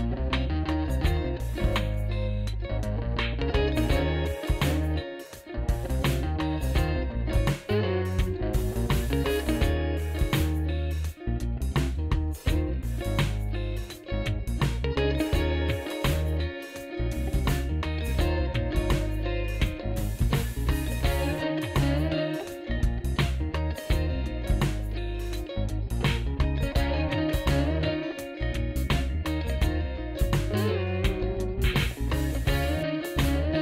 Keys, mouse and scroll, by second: 1.7 click, 4.5 click, 9.9 click, 26.1 F4.